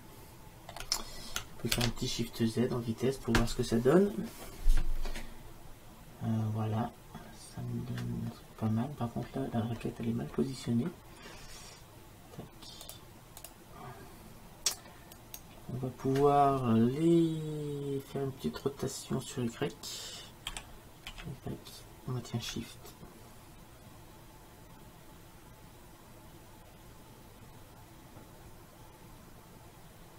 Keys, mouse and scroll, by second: 2.6 shift+z, 12.9-15.5 drag, 15.5-16.9 middle drag, 20.5 r.